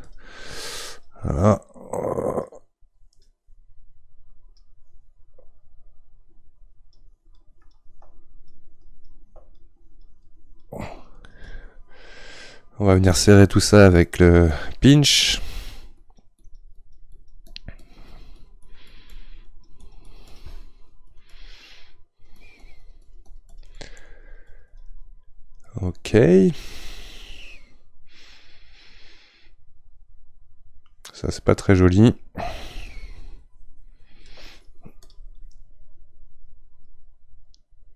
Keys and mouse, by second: 25.7-28.7 middle drag, 32.9-37.9 shift+drag.